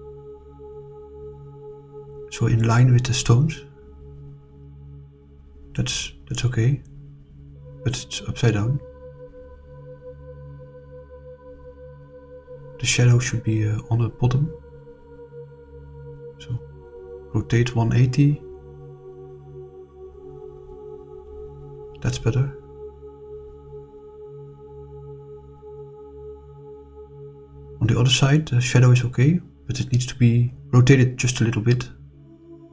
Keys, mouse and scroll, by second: 0.3 r, 3.0 click, 4.3 click, 4.7 click, 5.5-7.7 middle drag, 8.5-11.6 middle drag, 14.0 click, 15.7 r, 16.1 1, 16.1 2, 18.1-18.8 typing, 19.4 Return, 20.8 click, 22.2-24.3 scroll up 6, 24.3 scroll down 2, 24.8-25.4 middle drag, 25.9-30.1 middle drag, 30.2 scroll down 2, 31.4 click, 32.5 click.